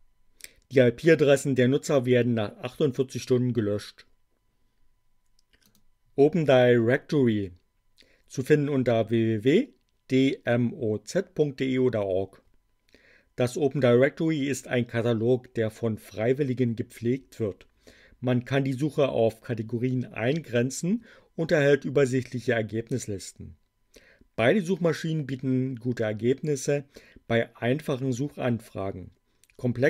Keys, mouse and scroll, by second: 5.6 click.